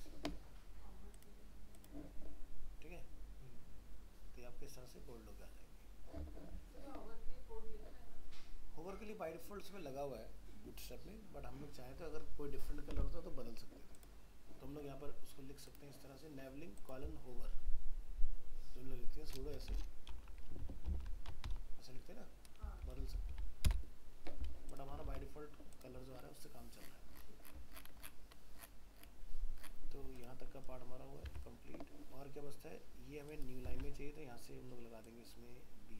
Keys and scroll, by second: 25.1 ctrl+s, 31.3 alt+Tab.